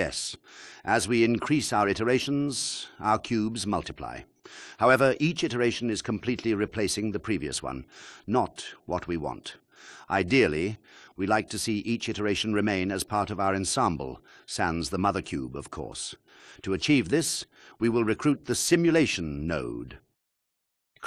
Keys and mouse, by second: 0.2 drag, 4.1 click, 5.0 click, 5.4 click, 6.2 click, 6.4 click, 9.1 click, 10.1 click, 11.4-11.7 drag.